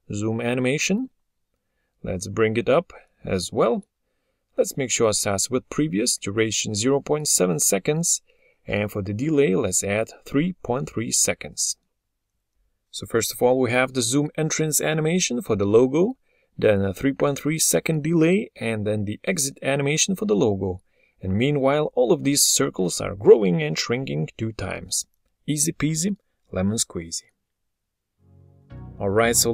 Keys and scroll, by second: 29.3 0.